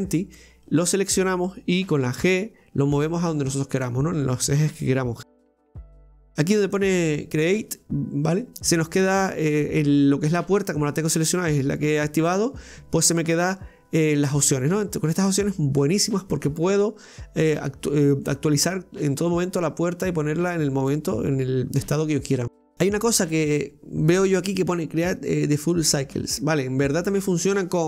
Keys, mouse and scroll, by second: 2.0 g, 5.3 click, 6.7 click, 15.2-18.3 drag, 18.4-22.4 drag.